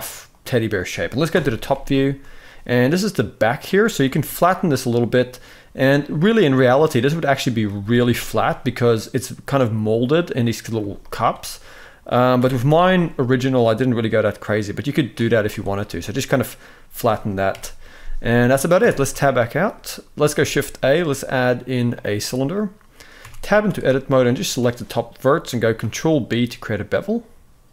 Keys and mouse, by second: 1.0 KP_7, 1.7 shift+middle click, 2.2-3.3 drag, 3.7 g, 7.0 click, 7.5 s, 10.5 z, 11.1 click, 12.1 s, 15.1 z, 15.7 middle click, 17.2 KP_1, 18.5 Tab, 19.2 shift+middle click, 20.1 shift+a, 22.9 Tab, 23.2 z, 23.9 click, 25.5 ctrl+b.